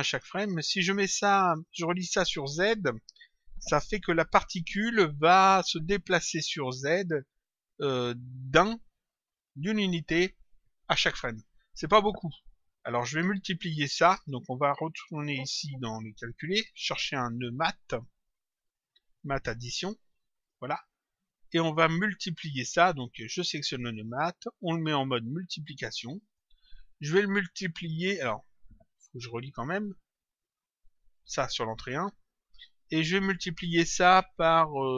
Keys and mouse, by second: 13.6 click, 16.3 click, 19.0 click, 21.8 click, 23.9 click, 25.1 click, 29.1 click, 30.7 click, 33.1 click.